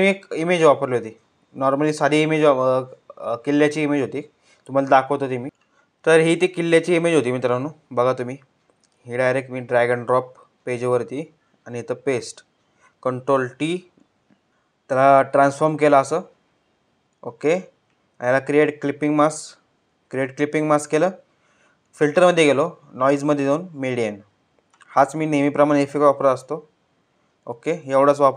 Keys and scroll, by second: 12.8 ctrl+t.